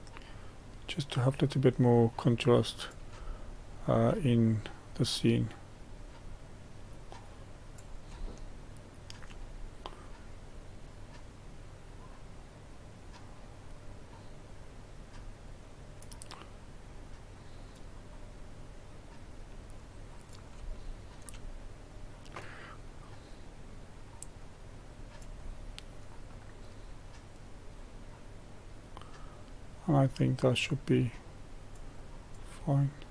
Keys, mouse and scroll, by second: 3.3-4.4 shift+middle drag, 4.4-7.7 drag, 8.3-9.5 shift+middle drag, 9.5-9.9 scroll up 1, 10.0-13.2 drag, 16.4-20.7 drag, 20.7-21.8 shift+middle drag, 21.8-25.4 drag, 25.4 middle click, 26.3-33.1 drag.